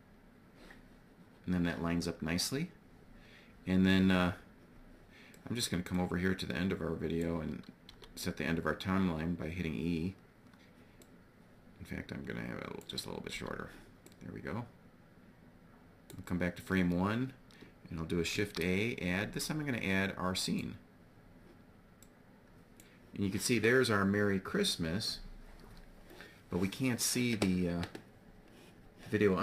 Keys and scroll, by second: 7.4 e, 12.8 e, 17.8 shift+a.